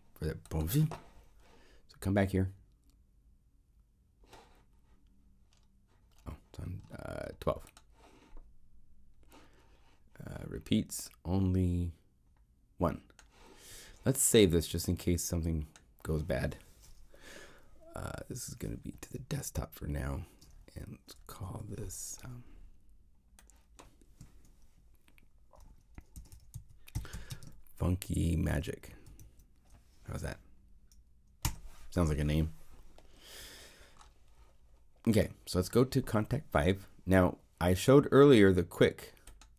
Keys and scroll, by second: 19.1 super+f, 19.9 super+d, 21.4 super+Tab, 25.9-29.6 typing, 31.4 Return.